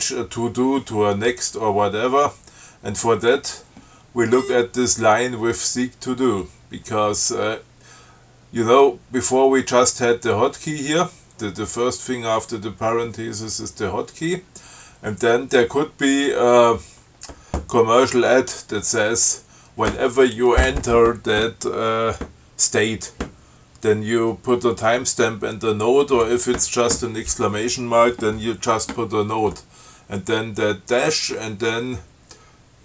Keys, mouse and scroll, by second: 4.5-4.9 scroll up 2.